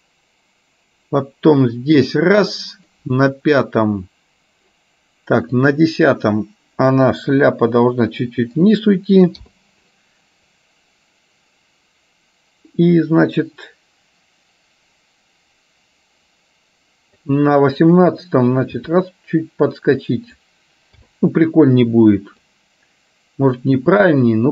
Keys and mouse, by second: 0.0-3.1 drag, 5.7 click, 7.6 r, 9.6 i, 10.7-17.5 drag, 18.9 r, 21.1 i, 22.6-24.5 drag.